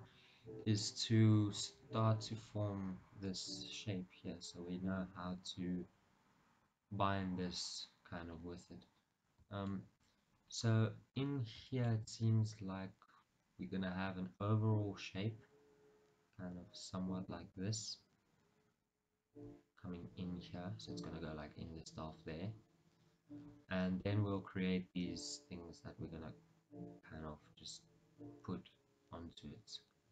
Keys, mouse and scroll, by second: 1.8 KP_1, 4.0-5.1 scroll down 1, 5.1 scroll up 1, 7.7-8.2 scroll down 1, 9.1-9.8 scroll up 1, 9.8 shift+middle click, 10.3 scroll up 1, 11.4-11.8 scroll down 1, 11.8 shift+middle click, 12.8-14.6 scroll up 1, 24.0 scroll down 1.